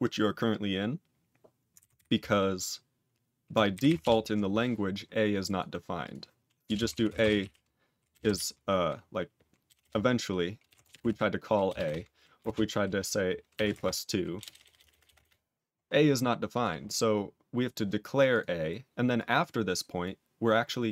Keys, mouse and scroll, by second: 4.0 ctrl+Return, 5.4 click, 5.5 click, 6.0 click, 6.6 Return, 6.6-8.2 typing, 9.6-12.3 typing, 13.7-15.1 typing, 16.5 click, 16.8 click, 17.7 click, 18.1 click, 18.2 click, 19.1 click, 20.0 click.